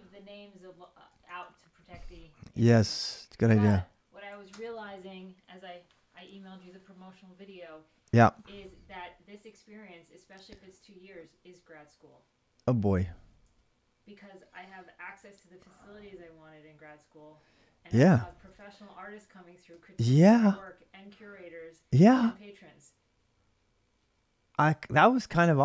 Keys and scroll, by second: 0.4 ctrl+[, 0.8-2.4 typing, 4.2 ctrl+[, 4.4 k, 9.1 l, 12.5-20.9 typing, 19.8 ctrl+[.